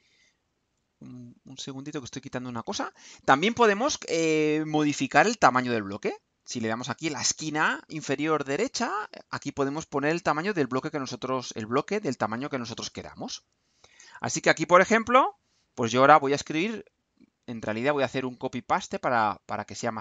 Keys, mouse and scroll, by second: 1.7 click, 5.4-6.7 drag, 8.7-13.1 drag, 13.6 click, 14.9 click, 16.1 BackSpace, 17.8 click, 18.8-20.0 drag.